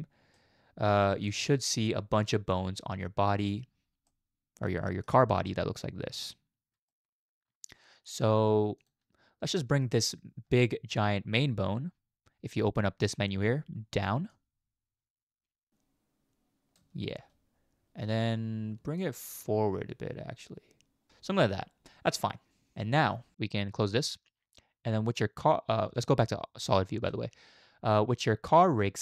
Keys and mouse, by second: 0.4-3.5 middle drag, 4.1-5.1 middle drag, 5.5-6.3 middle drag, 6.9-7.7 shift+middle drag, 8.8 click, 9.8 shift+middle click, 13.1 click, 14.3-16.8 drag, 19.0-21.1 shift+drag, 22.8 middle drag, 25.9 z.